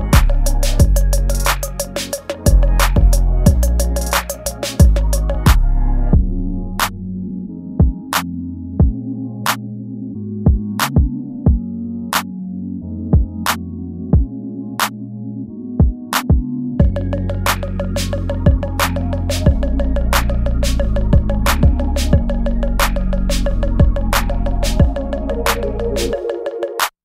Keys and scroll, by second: 0.7 space, 1.0 ctrl+z, 1.6 ctrl+z, 1.9 space, 2.7 space, 3.6 space, 4.1 space, 4.4 ctrl+z, 5.0 ctrl+z, 5.1 space, 5.2 ctrl+z, 5.6 space, 6.1 space, 6.5 space, 7.0 ctrl+z, 7.9 space, 9.4 space, 13.7 ctrl+z, 19.1 space, 19.4 space, 22.0 ctrl+z, 22.4 ctrl+z.